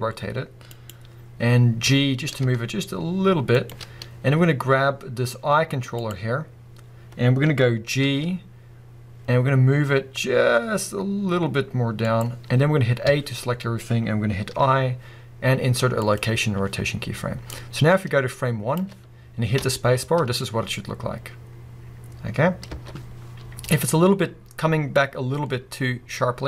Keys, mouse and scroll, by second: 0.9 click, 1.8 g, 3.7 shift+click, 5.9 click, 6.5-7.0 scroll down 2, 7.0-8.0 scroll up 2, 8.0 g, 12.1 click, 13.1 a, 14.5 i, 17.5 click, 18.3-19.7 drag, 19.1 scroll down 2, 19.6 space, 22.6 space, 23.9-24.6 scroll up 1, 25.0 click.